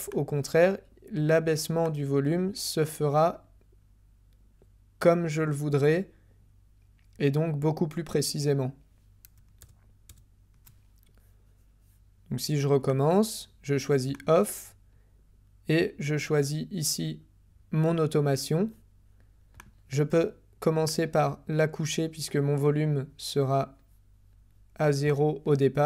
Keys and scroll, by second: 9.6 super+z.